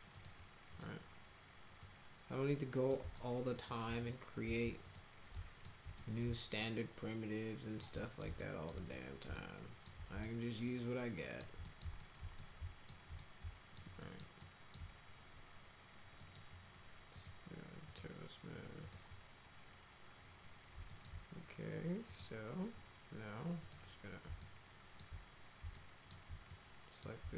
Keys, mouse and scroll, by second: 0.2 click, 0.7 click, 1.8-2.9 drag, 3.2 alt+middle click, 4.9 click, 5.4 alt+middle click, 6.0 middle click, 6.6-7.8 alt+middle drag, 8.0 middle click, 8.4 alt+middle click, 9.4 alt+middle click, 10.2-11.4 alt+middle drag, 11.7 right click, 12.0 alt+right click, 12.4 alt+right click, 13.2 alt+right click, 14.0 alt+middle click, 14.4 alt+middle click, 16.2 middle click, 17.1 click, 17.9 click, 18.8 click, 20.9 alt+middle click, 22.1 click, 23.6 click, 24.4 alt+middle click, 25.8 alt+middle click, 26.5 click.